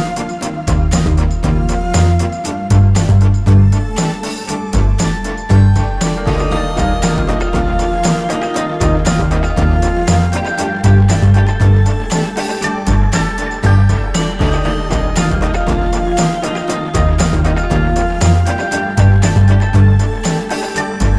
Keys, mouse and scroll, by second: 0.0 shift+click, 7.6 shift+click, 15.2 shift+click, 17.9 alt+scroll down 1, 18.9-20.6 drag, 20.6 alt+scroll up 1.